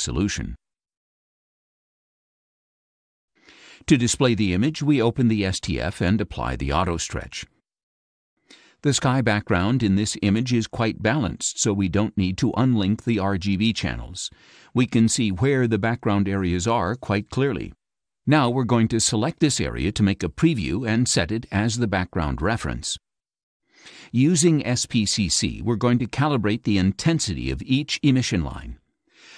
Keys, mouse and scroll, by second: 1.1 click, 5.0 click, 7.6 click, 9.4 click, 12.5 click, 13.9 click, 16.3-17.9 drag, 19.9 click, 21.9-24.0 drag.